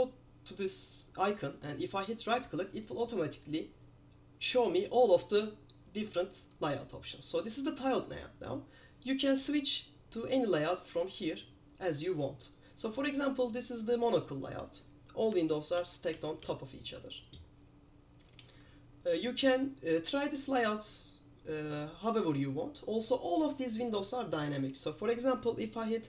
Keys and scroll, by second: 15.9 super+j, 16.2 super+j, 16.5 super+j.